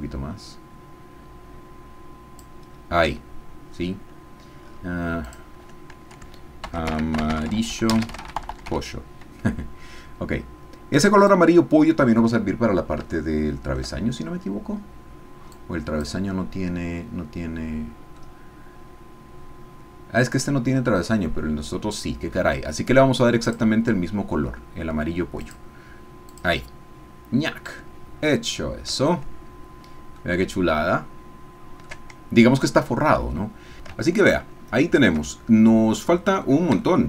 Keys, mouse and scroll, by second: 5.2 click, 6.6-8.3 typing, 11.2 click, 13.3 shift+click, 14.7-15.5 scroll up 1, 15.5 click, 16.3-21.0 middle drag, 25.4-26.6 drag, 28.1-28.9 scroll down 2, 29.0-30.3 shift+drag, 30.4-32.0 shift+drag, 34.1-36.7 shift+middle drag, 36.8 shift+middle click.